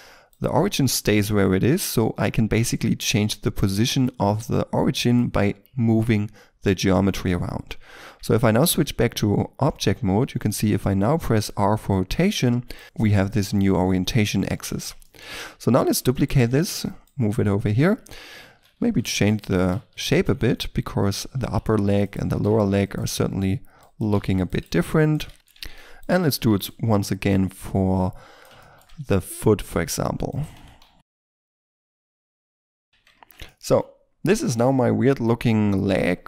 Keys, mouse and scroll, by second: 0.3 right click, 7.4-7.9 scroll down 1, 7.9 Tab, 10.1 r, 12.7 right click, 12.8 shift+middle click, 14.2-15.0 scroll up 1, 15.0 shift+middle click, 15.9 shift+d, 16.2 right click, 18.1 Tab, 18.6 alt+right click, 18.7 s, 19.5 a, 19.7 c, 19.9 right click, 20.2 s, 21.9 right click, 22.3-26.3 typing, 22.9 right click, 24.5 right click, 25.3 shift+middle click, 25.5 Tab, 25.9 right click, 26.5 right click, 28.6 shift+middle click, 28.8 Tab, 29.7-32.7 typing, 31.7 right click, 31.9 Tab, 32.0 shift+middle click, 32.1 shift+middle click, 32.3 Tab, 32.4 ctrl+r, 32.5 right click, 32.8 right click, 32.9 Tab, 33.1 scroll down 1, 33.4 shift+middle click, 33.9-34.4 shift+scroll up 2, 34.4 shift+middle click, 34.8 Tab, 35.0 a, 35.2 c, 35.7-36.2 scroll down 1, 36.2 right click.